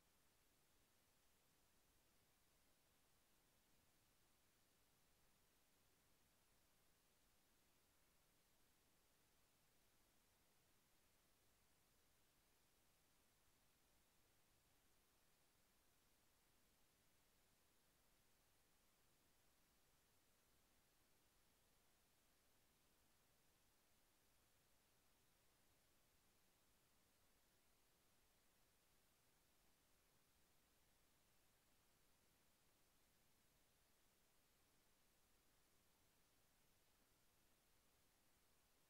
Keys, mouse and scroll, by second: 1.0 click, 4.4 click, 6.5 click, 18.2 click, 24.1 click, 26.6 click, 30.4-32.7 drag.